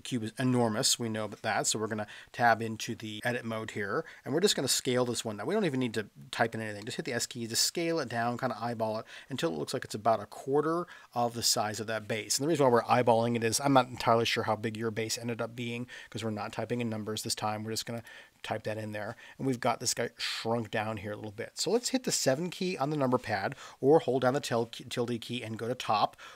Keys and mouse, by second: 2.1 Tab, 6.8 s, 18.0 click.